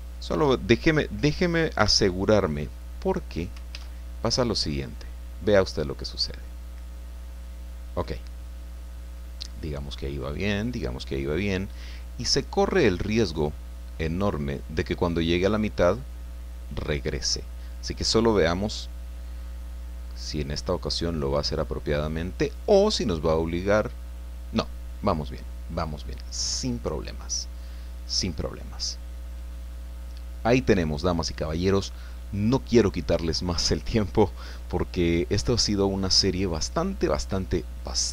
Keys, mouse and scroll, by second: 1.8 i, 2.7 click, 3.7 alt+a.